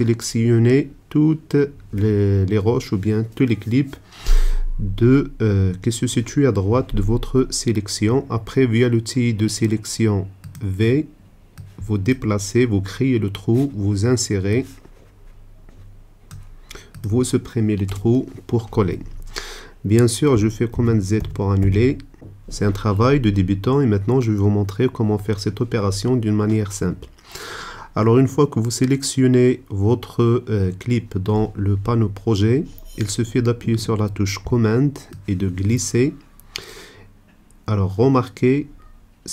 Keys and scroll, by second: 10.8 v, 17.8 BackSpace, 20.9 super+z.